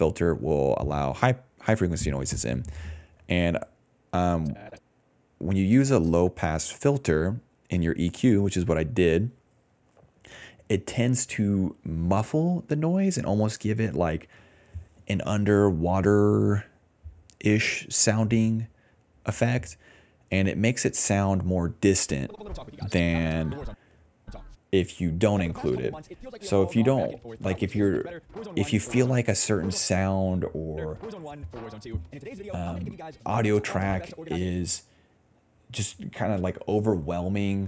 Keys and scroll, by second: 14.9 ctrl+c, 15.2 alt+v, 17.8 BackSpace, 22.3 space, 23.6-25.7 typing, 25.1 ctrl+s, 27.1 s, 27.5 d, 29.0-30.0 typing, 31.2 s, 31.8 s, 33.2 s, 34.4 space, 35.4-36.6 typing, 36.9 Return.